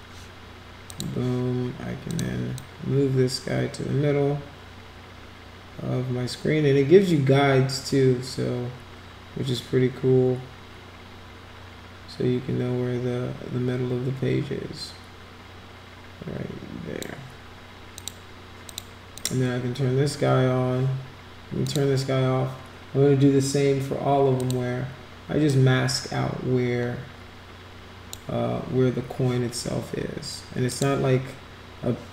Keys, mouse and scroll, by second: 0.9 click, 2.1 click, 2.5-17.0 drag, 17.9 click, 18.6 click, 19.2 click, 21.6 click, 24.4 click, 25.4 click, 30.7 click.